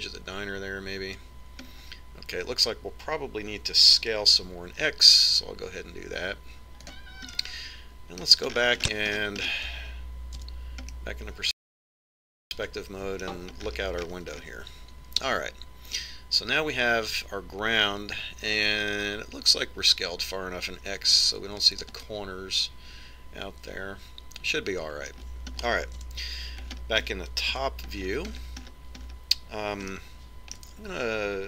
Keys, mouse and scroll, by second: 3.6-5.7 middle drag, 5.7 s, 9.3-11.0 middle drag, 11.0-12.4 scroll up 1, 12.4 KP_5, 14.7-18.8 middle drag, 26.6 middle click, 27.1 KP_7, 28.6 KP_5, 31.0-31.4 middle drag.